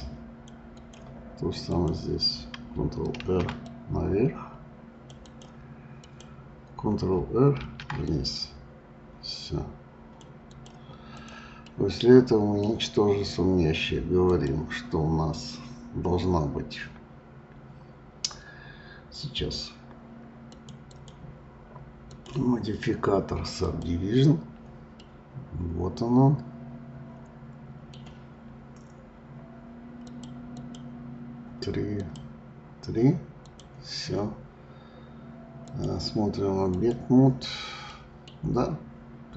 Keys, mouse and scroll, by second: 1.7 click, 3.1 ctrl+r, 5.9 click, 7.5 ctrl+r, 11.1 click, 11.7-12.8 middle drag, 12.8 scroll down 2, 14.3-17.5 drag, 20.9 click, 22.1-24.9 drag, 24.9-28.0 middle drag, 30.1-33.5 drag, 35.6-37.8 drag, 37.8 middle click, 38.5 scroll up 2, 39.0-39.3 scroll down 1.